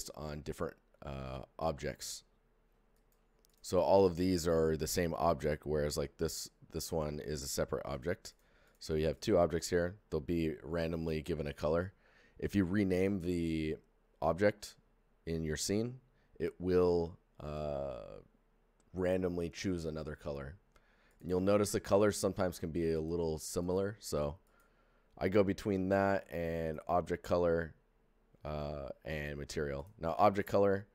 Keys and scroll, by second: 3.7 alt+g, 5.6 g.